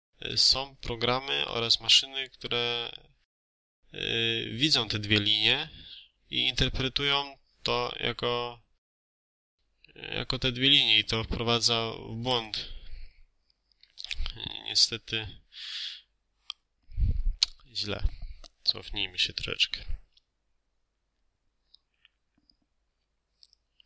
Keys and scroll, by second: 14.7 Escape.